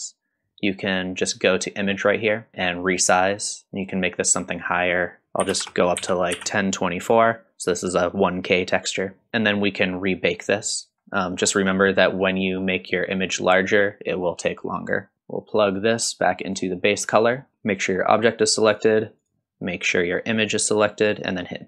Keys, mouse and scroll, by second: 9.3-11.3 scroll down 4, 11.3-12.1 scroll down 4, 12.1 middle click, 15.1-16.6 drag, 17.0 middle click, 19.2 click, 19.2 scroll down 1.